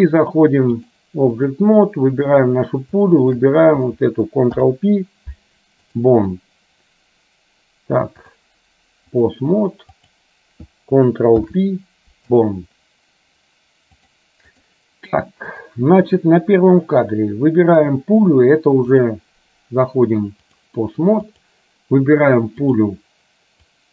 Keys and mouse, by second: 0.4 click, 0.9 click, 2.4 click, 3.3 shift+click, 4.7 ctrl+p, 8.4-9.4 drag, 10.2 click, 11.6 ctrl+p, 14.1 click, 19.1-20.8 drag, 21.3 click, 22.7 click, 23.7-23.9 drag.